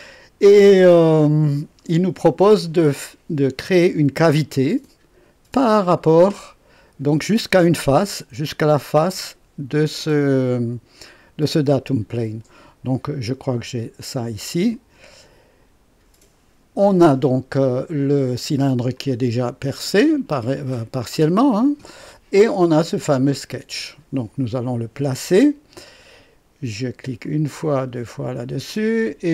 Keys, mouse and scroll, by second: 12.8 click, 14.7 click, 18.9-22.1 drag, 23.2 click, 27.2 click, 27.8 click.